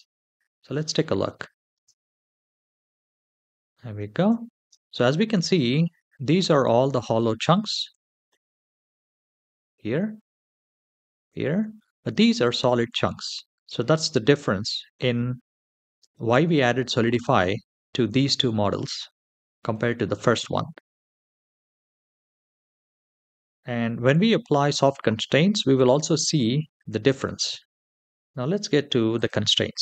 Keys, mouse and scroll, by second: 0.0-0.6 shift+middle drag, 0.8 middle click, 1.5 space, 3.6-4.1 shift+middle drag, 4.4 space, 5.1-6.3 scroll up 4, 8.1-8.6 shift+middle drag, 10.7 shift+middle drag, 11.6 shift+middle drag, 12.2-13.9 scroll up 2, 13.9-14.5 scroll down 2, 14.5 scroll down 1, 14.7-15.3 shift+middle drag, 16.8 scroll up 2, 17.6 shift+middle drag, 19.2 shift+middle click, 20.6-21.2 scroll up 2, 21.7-22.2 scroll down 3, 22.3-22.9 shift+middle drag, 23.2-23.7 scroll down 2, 23.9-24.3 shift+middle drag, 26.8 click, 28.0 shift+middle click, 29.0-29.8 drag.